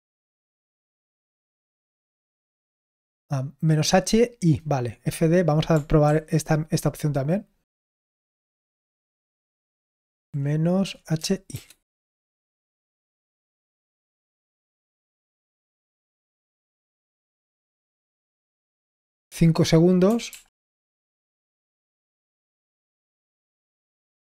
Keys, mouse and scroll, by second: 3.6-5.0 scroll down 1, 5.0 click, 5.9 ctrl+p, 7.7 click, 8.4 ctrl+p, 10.1 ctrl+p, 11.4 shift+i, 11.8 Return, 20.2 ctrl+p, 20.7 Return.